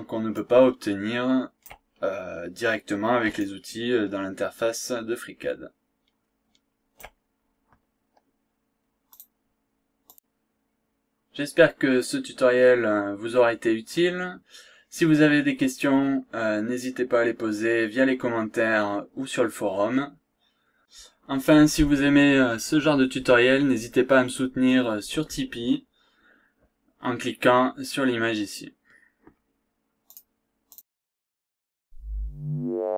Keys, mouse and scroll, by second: 0.4-1.9 shift+right drag, 1.9-2.2 shift+scroll down 1, 2.3-2.6 scroll up 1, 2.7 scroll down 2, 2.9 scroll up 2, 3.4-7.2 shift+right drag, 9.1 click.